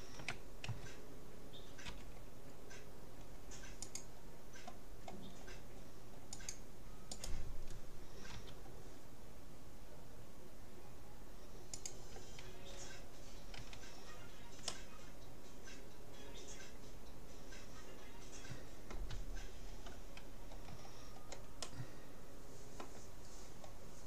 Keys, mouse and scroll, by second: 0.8 a, 2.0 c, 7.4-9.0 right drag, 8.4 g, 13.6 a, 14.0-16.2 middle drag, 19.4-23.4 middle drag.